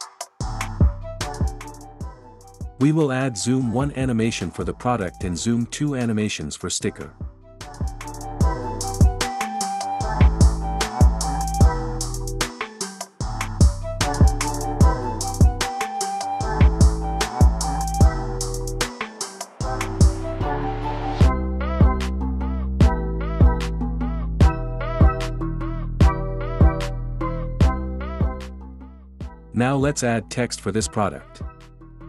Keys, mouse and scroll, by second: 6.9 click, 9.6 space, 11.3 click, 12.7 click, 16.1 click, 17.7 space, 24.9 click, 28.1 click, 30.2 click.